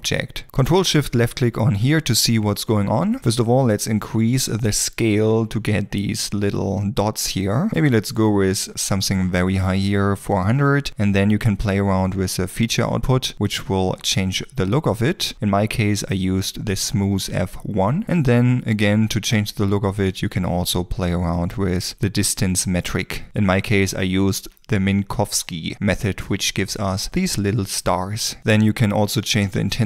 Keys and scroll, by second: 7.7 0, 7.9 Return.